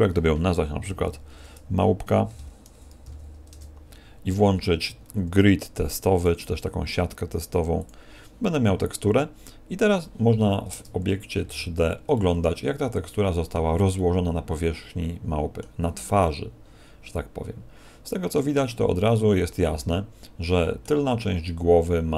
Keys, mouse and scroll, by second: 8.7-10.7 scroll down 6, 10.7 Tab, 11.3 z, 12.1 middle click, 13.9 middle click, 16.1 middle click, 19.0 middle click.